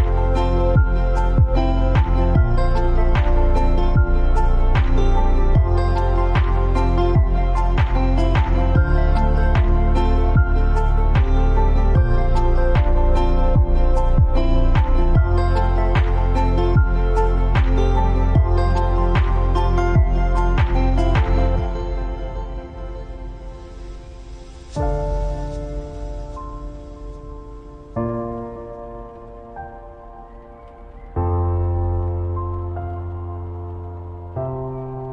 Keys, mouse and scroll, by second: 0.2 Down, 3.9-4.4 alt+scroll up 2, 4.7-5.2 scroll down 1, 5.3 alt+scroll up 1, 5.9 click, 6.3 space, 7.1 click, 8.3 click, 8.7 space, 9.9-14.0 alt+drag, 14.0 t, 14.3 click, 16.7-19.5 scroll down 1, 19.5 click, 22.0-27.5 typing, 30.1-35.1 drag.